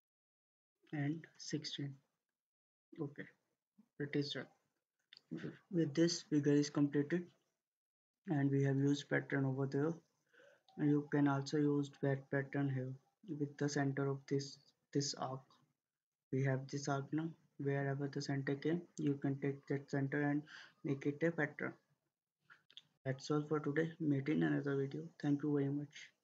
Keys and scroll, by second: 0.9-1.8 typing.